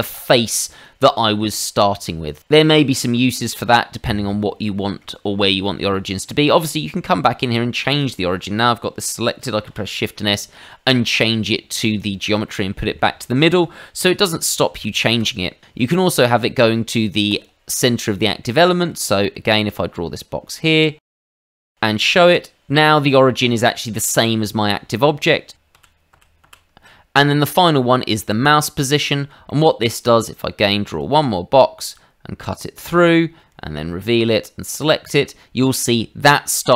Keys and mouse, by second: 0.8 middle click, 3.7 middle click, 4.6 shift+middle click, 5.6 middle click, 6.7 middle click, 7.9 click, 9.6 shift+s, 11.8 click, 12.4 middle click, 14.4 ctrl+z, 14.7 ctrl+z, 15.2 ctrl+z, 17.3 click, 17.9 middle click, 18.6 shift+middle click, 19.0 middle click, 19.6 click, 21.1 click, 21.3 middle click, 21.6 click, 23.0 middle click, 25.7 ctrl+z, 26.1 ctrl+z, 26.4 ctrl+z, 27.5 click, 28.4 click, 29.0 middle click, 29.5 shift+middle click, 29.9 middle click, 31.0 click, 32.8 click, 34.0 click, 34.8 click.